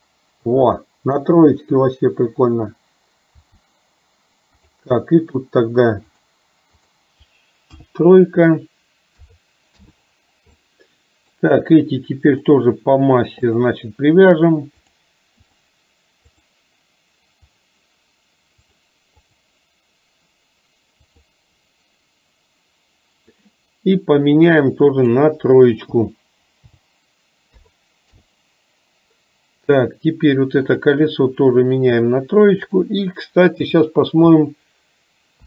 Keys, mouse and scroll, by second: 4.6 click, 6.3-9.9 drag, 10.6 middle click, 15.0-16.6 drag, 17.6 click, 18.8-21.4 drag, 24.5-28.3 drag, 30.7 click, 32.0-35.4 drag.